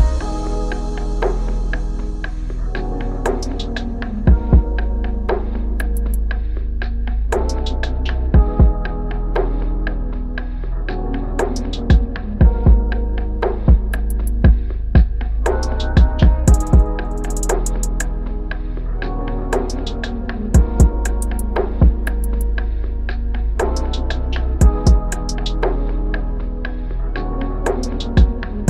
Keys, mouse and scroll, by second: 5.5 ctrl+-, 5.9 ctrl+-, 8.1 ctrl+h, 13.2 ctrl+r, 17.3 ctrl+click, 23.8 shift+click.